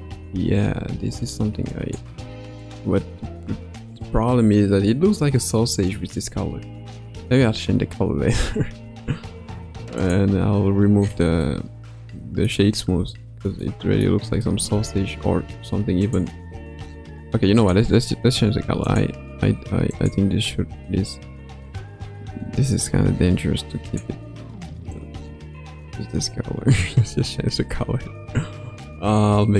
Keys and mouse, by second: 0.2 space, 1.3-1.9 drag, 2.6 click, 6.3 space, 8.8 space, 10.0 click, 11.4-12.5 middle drag, 13.1-13.5 shift+middle drag, 13.6-14.0 middle drag, 14.4-14.7 shift+middle drag, 16.0 click, 18.4 ctrl+Tab, 18.8 click, 19.9 click, 23.8 click.